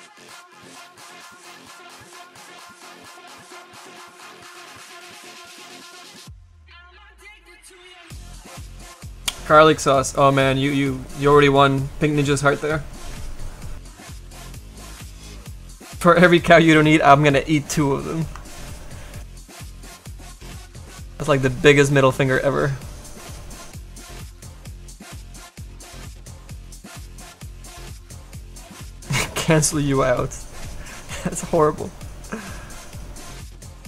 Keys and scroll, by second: 23.7 s, 24.0 s.